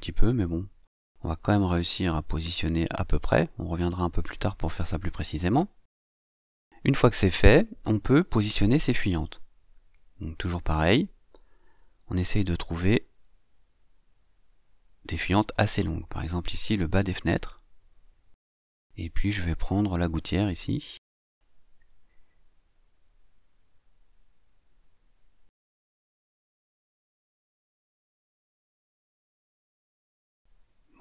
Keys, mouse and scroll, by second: 1.4-7.3 drag, 7.8-8.1 scroll up 1, 8.1-10.0 scroll down 1, 11.0-15.5 drag, 16.4-19.3 drag, 22.4-26.4 drag, 27.3-29.3 drag, 29.5 click, 30.7-31.0 drag.